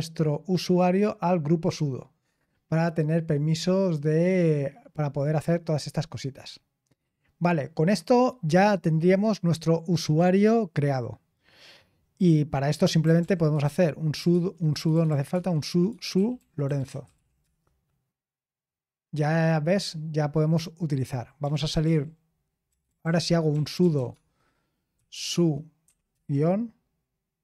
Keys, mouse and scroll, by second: 1.7 typing, 2.3-3.7 scroll down 1, 3.7-4.4 scroll down 1, 4.4-6.6 scroll down 1, 6.6-8.4 scroll down 1, 8.4-8.9 scroll down 1, 8.9-11.5 scroll down 1, 11.5-12.8 scroll down 1, 12.5-17.6 typing, 21.1-26.1 typing.